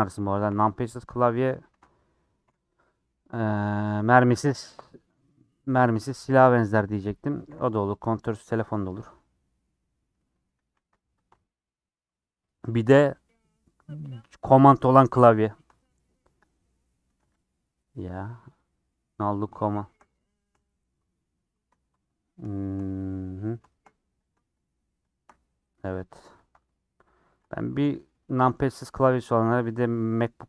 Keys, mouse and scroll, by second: 0.3 shift+click, 0.5 middle click, 2.5 ;, 3.7 scroll up 1, 3.7-5.0 middle drag, 5.0 scroll down 1, 5.6 3, 7.5 ;, 8.6-10.6 middle drag, 10.6 a, 11.3 u, 15.4-16.0 scroll down 11, 16.1 middle click, 16.6-16.9 scroll up 4, 17.4 click, 18.6 click, 19.2 middle click, 20.1 click, 20.3 shift+middle click, 20.9-21.6 scroll down 3, 22.0 click, 23.1-24.2 middle drag, 24.2 click, 25.1 shift+click, 26.0 click, 26.4 ctrl+click, 27.2 click, 27.7 middle click, 28.4 scroll down 3, 28.7-30.4 middle drag.